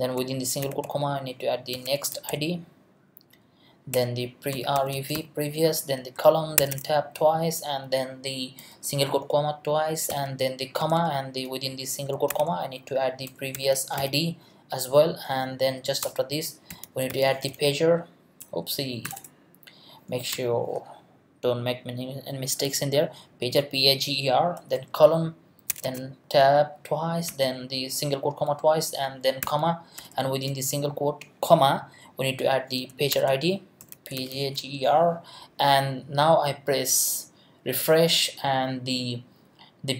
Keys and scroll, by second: 1.1-2.8 typing, 3.1 Right, 3.9 Return, 4.3-6.6 typing, 10.1 ,, 10.8 Left, 12.3-14.5 typing, 14.9 Right, 16.0 Return, 16.4-18.0 typing, 19.0 BackSpace, 20.3 r, 24.7 shift+;, 25.7 shift+Tab, 27.3 ', 29.4 ,, 30.0 Left, 33.1-35.1 typing.